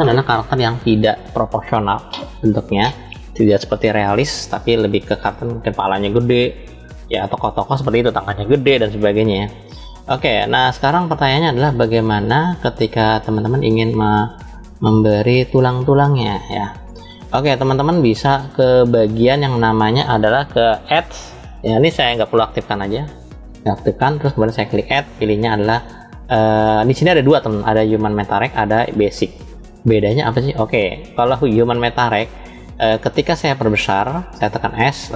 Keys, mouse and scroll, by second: 5.2 click, 9.4 click, 10.7 click, 11.4 click, 12.5-17.2 middle drag, 20.6-21.8 drag, 22.4 click, 24.5-31.6 drag.